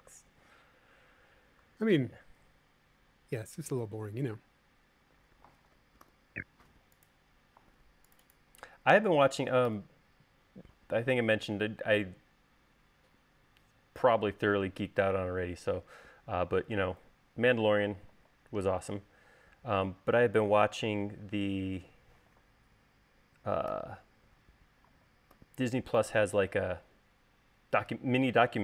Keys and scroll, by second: 6.9 u, 10.6 u, 24.3 u, 26.0 u.